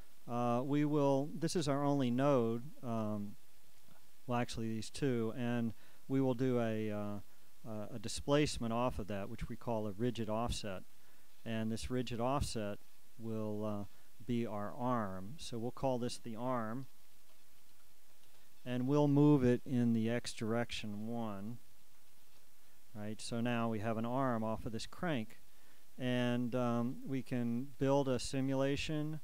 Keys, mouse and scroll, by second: 2.1-10.7 right drag, 9.2-10.7 drag, 12.1 click, 13.8 click, 15.9 shift+click, 17.2 shift+a, 17.6 shift+r, 17.8 shift+m, 18.4 shift+Return, 20.4 shift+click, 21.9 1, 22.4 Return, 25.2 click, 25.8 click, 27.9 click, 28.6 click.